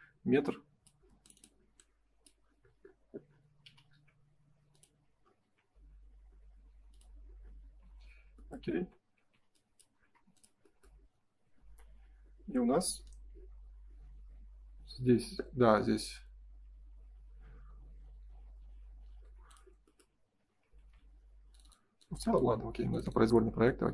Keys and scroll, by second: 7.6 space, 7.8 Escape, 8.7 ctrl+s, 9.2 e, 10.1 space, 11.8 ctrl+s, 20.7 ctrl+s.